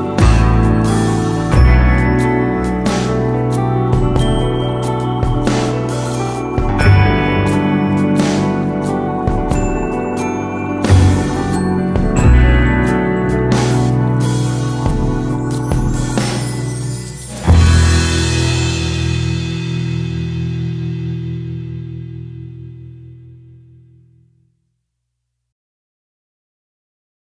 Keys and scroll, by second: 1.7 Right.